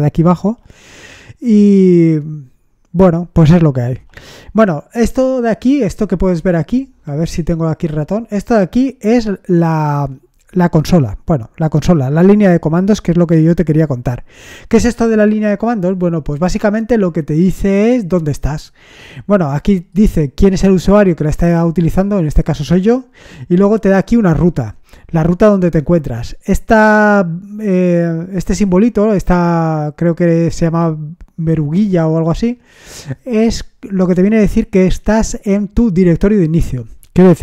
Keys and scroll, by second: 4.0 BackSpace.